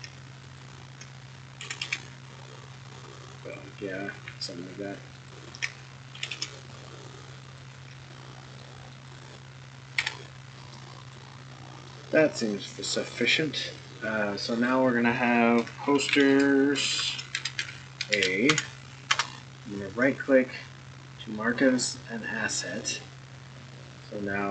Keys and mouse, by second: 0.5 alt+click, 1.6 g, 6.1 g, 8.0-8.6 middle drag, 8.9 click, 9.9 Tab, 10.5 middle drag, 11.1 click, 11.4-11.9 middle drag, 12.8-13.1 middle drag, 14.4 click, 14.5-19.8 drag, 20.0-21.5 right drag.